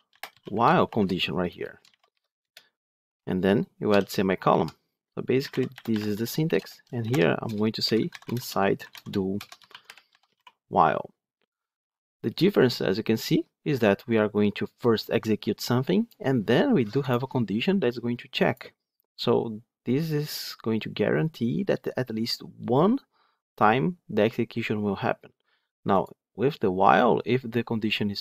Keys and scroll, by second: 2.4 Return, 5.8 Return, 9.8 Tab.